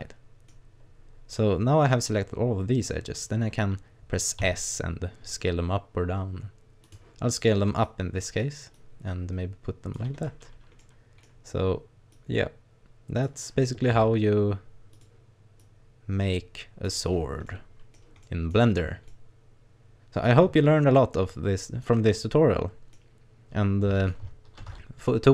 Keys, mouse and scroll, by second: 1.4 middle click, 4.4 s, 6.9 click, 7.8 click, 8.8 click, 10.2-11.0 scroll down 8, 10.8 middle click, 11.3-11.9 scroll up 1, 12.2 click, 14.0 s, 15.0 click, 15.6 click, 17.2 scroll up 2, 17.5 middle click, 18.3 middle click, 18.6-19.0 scroll up 2, 19.1 middle click, 21.0 middle click, 24.6 ctrl+r.